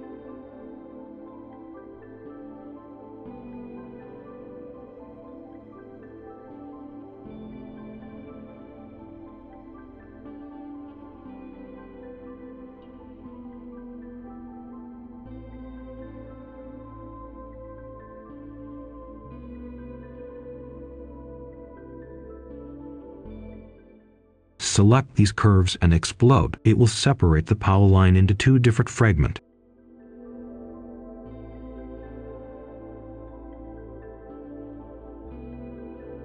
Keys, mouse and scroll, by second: 0.6 click, 2.4 right click, 4.5 click, 4.8 right click, 6.4 click, 7.8 right click, 9.4 click, 11.4-13.7 right drag, 13.7-14.5 scroll up 1, 14.5 click, 19.0 right click, 19.3 scroll down 1, 19.6 right click, 20.2 click, 23.3 shift+click, 24.5 click, 27.2 right click, 28.2 click, 31.3 scroll down 1, 31.5 right click, 32.4 click, 32.6 ctrl+a, 33.0 ctrl+z, 33.2 ctrl+s, 33.9 Return, 34.5 click, 34.9 Escape, 36.1 click.